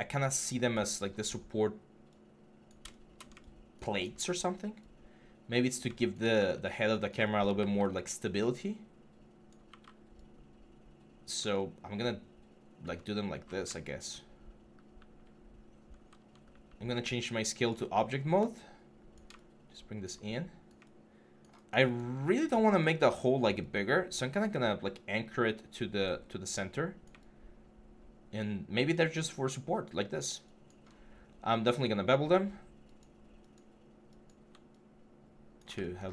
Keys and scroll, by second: 6.1 w, 7.3 w, 16.7 r, 17.3 r, 22.7 w.